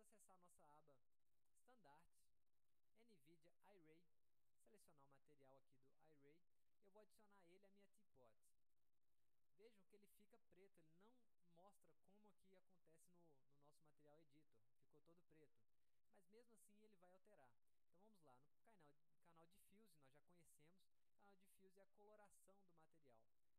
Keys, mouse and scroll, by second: 1.4 click, 3.2 click, 3.7-4.1 scroll down 1, 4.7 click, 6.4 click, 8.2 click, 16.3 click, 19.8 click, 21.4-21.9 drag, 23.0 click.